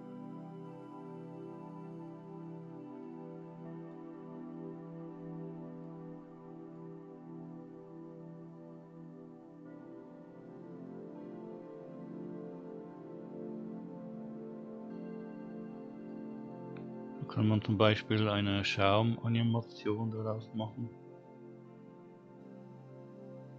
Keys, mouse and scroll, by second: 0.6 scroll up 1, 1.7 scroll up 1, 3.2-4.4 middle drag, 6.1-7.2 middle drag, 12.0-12.7 scroll down 1, 16.4-17.4 middle drag.